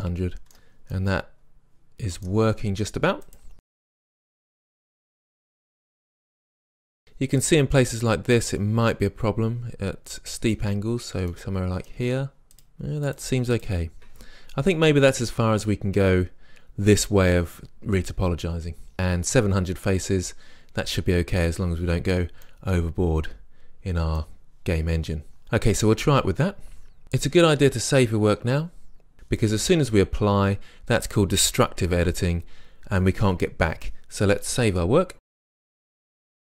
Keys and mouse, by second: 0.5-1.8 middle drag, 3.3-4.8 middle drag, 4.8 click, 5.6-7.9 drag, 7.9-9.0 middle drag, 12.4-15.5 drag, 15.5-22.5 middle drag, 22.9-24.4 middle drag, 35.2-35.7 drag.